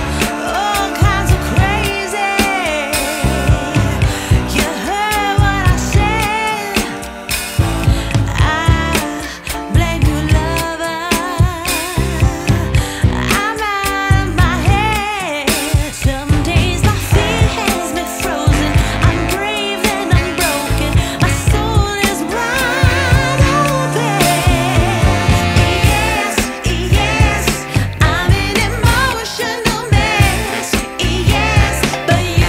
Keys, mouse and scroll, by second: 4.4 ctrl+s, 4.8 Tab, 6.1 KP_0, 6.8-8.5 scroll up 5, 8.5 scroll down 1, 9.6-11.2 scroll up 3, 11.2-12.8 drag, 12.8 KP_0, 14.6-15.4 scroll down 4, 15.4 click, 15.9-17.4 scroll up 4, 17.4-19.0 scroll down 3, 19.0-23.8 drag, 24.5-27.5 drag, 27.6-31.0 drag, 31.5-31.9 scroll down 1, 32.2-32.4 drag.